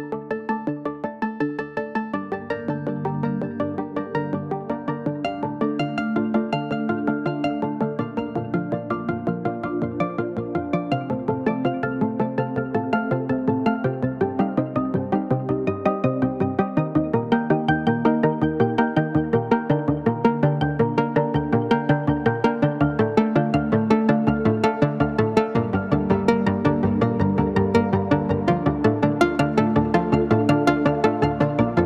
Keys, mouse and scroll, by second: 9.0-17.2 drag, 9.0 typing, 10.6 typing, 17.2-19.6 drag, 19.6-21.1 drag, 21.1 typing, 22.1 ctrl+a, 23.0 click, 24.3 ctrl+d, 25.7 click, 29.6 click.